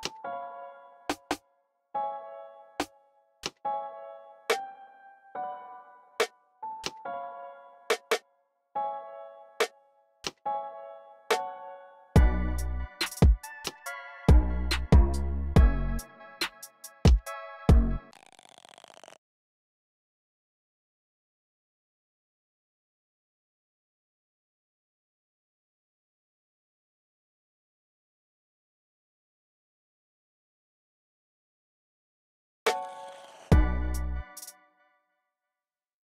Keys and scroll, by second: 1.6-2.6 typing, 3.1 super+r, 3.6-4.3 typing, 9.3 f, 15.6-17.7 typing, 22.0 f, 26.9 super+f, 27.5 super+f, 31.8 x, 32.2 x, 34.1 space, 34.4 f.